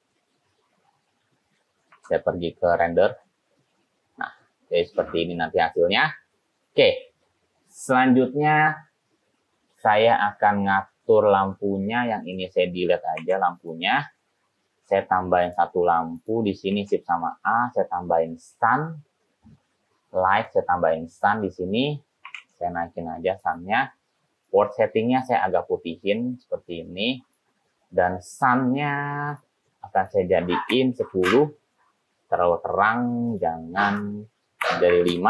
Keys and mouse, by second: 1.9 z, 12.3 click, 13.3 x, 15.5 click, 16.3 click, 16.8 shift+a, 22.4 g, 22.5 z, 23.6 click, 25.4 click, 29.5 click, 30.2-32.5 drag, 34.2-35.2 drag.